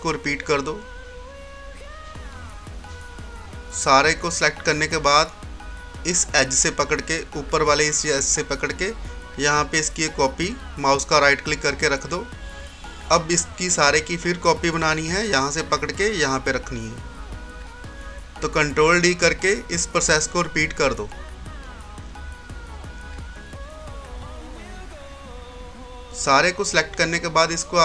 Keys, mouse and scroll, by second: 3.2-7.5 drag, 8.3-11.5 drag, 8.9 typing, 11.5 right click, 12.7-17.6 drag, 17.6 right click, 19.4 ctrl+d, 20.4-21.2 scroll down 1, 24.1 ctrl+d, 24.9-25.4 scroll down 1, 25.4 scroll up 1, 27.4 typing.